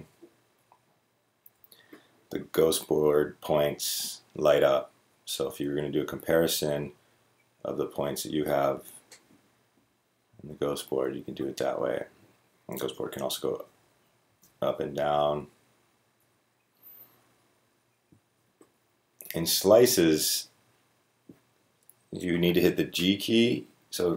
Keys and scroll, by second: 1.4-3.6 typing, 8.8-11.3 typing, 12.6 Up, 12.9 Up, 13.1 Up, 13.4 Down, 14.0 g, 14.3 Up, 15.0-16.0 Up, 16.2 Down, 16.8 Down, 17.4 Down, 18.1 Down.